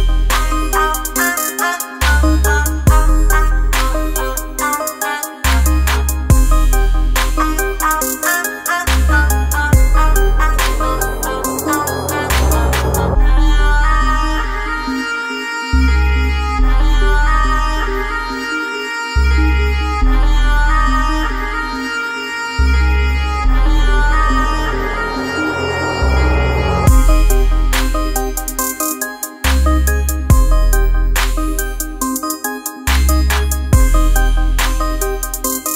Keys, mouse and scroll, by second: 4.6-5.0 alt+scroll down 3, 5.1 space, 5.6 click, 5.6 space, 6.0-10.7 ctrl+drag, 11.1 alt+scroll down 1, 11.4 space, 12.0 alt+scroll down 1, 12.4 space, 12.6 click, 13.0 space, 13.1 ctrl+click, 21.8-27.6 drag, 32.3 click, 33.5 ctrl+a.